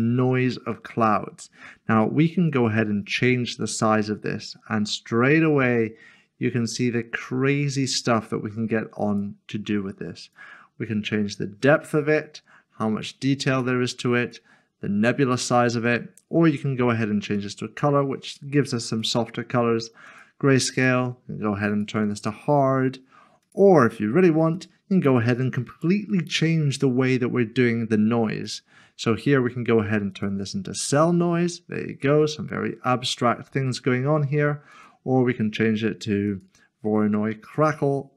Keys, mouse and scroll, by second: 2.5 middle click, 3.0 click, 28.4 click, 31.8 middle click, 38.0 click.